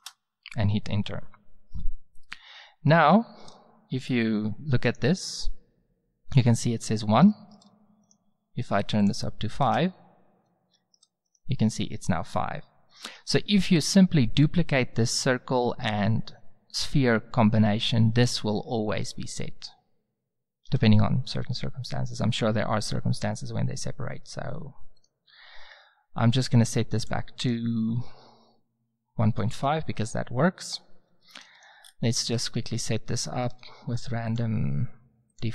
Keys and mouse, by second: 3.1-4.8 middle drag, 4.8-6.4 drag, 8.0-9.0 drag, 9.0 middle click, 9.8 click, 12.9 right click, 20.6 n, 21.9-23.9 drag, 25.1-26.8 right drag, 27.0 click, 31.2-31.5 middle drag, 31.5 right click, 31.8-32.4 middle drag, 32.4 Tab, 33.5 a.